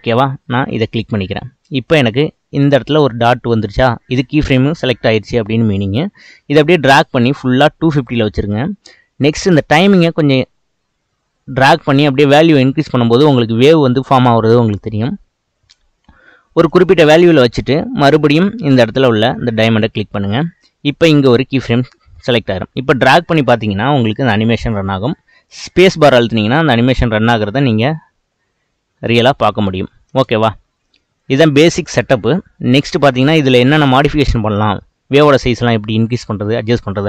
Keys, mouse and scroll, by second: 0.0-0.6 scroll up 1, 0.6 scroll up 1, 0.7 click, 6.2-9.5 drag, 9.7-12.8 drag, 19.2 click, 22.5-25.6 drag, 25.6 space, 27.5-27.9 middle drag, 27.9 scroll up 4, 28.4 scroll down 2, 30.1 space, 31.2-32.7 drag, 32.7-33.1 scroll down 1, 33.1 click, 33.9-37.0 middle drag.